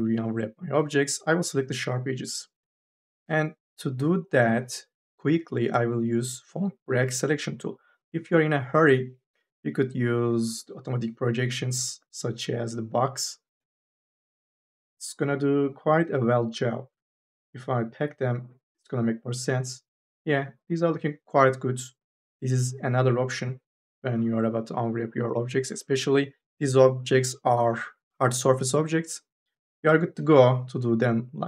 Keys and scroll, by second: 12.2 3.